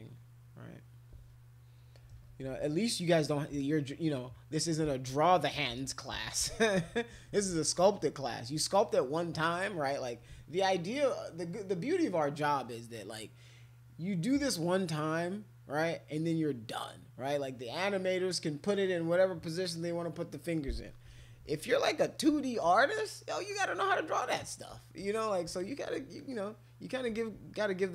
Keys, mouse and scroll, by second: 0.0 alt+click, 0.5 alt+click, 2.1 ], 2.4 ], 2.6 ], 3.9 alt+click, 4.1 alt+click, 4.4 alt+click, 5.7 ctrl+z, 6.1 ctrl+z, 6.4 ctrl+z, 6.7 ctrl+z, 7.6 alt+click, 22.6 click, 23.4-24.4 drag, 24.9 click, 25.5 alt+click, 26.2 click, 27.2 alt+click.